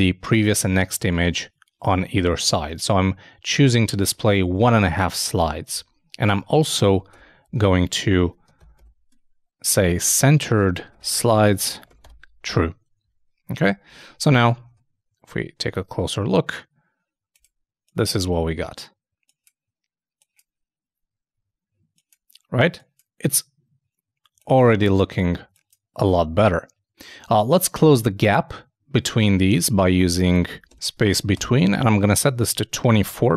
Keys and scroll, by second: 5.7 super+Tab, 6.8 super+,, 9.1 shift+d, 10.5-11.9 typing, 13.0 super+e, 13.9 super+Tab, 14.7 super+i, 29.2 super+Tab, 30.7-31.6 typing.